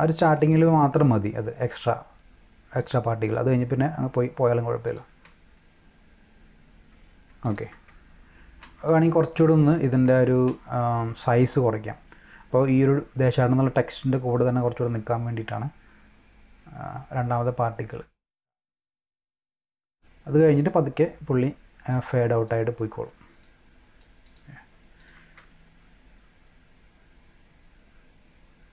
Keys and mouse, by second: 1.7-2.8 drag, 4.8 click, 5.1 space, 7.3 space, 7.4 click, 7.7 space, 8.6 space, 8.9 click, 10.1 space, 10.5 space, 15.4-18.5 drag, 21.9 click, 23.4 click, 24.3 click, 25.0 click, 25.2 space.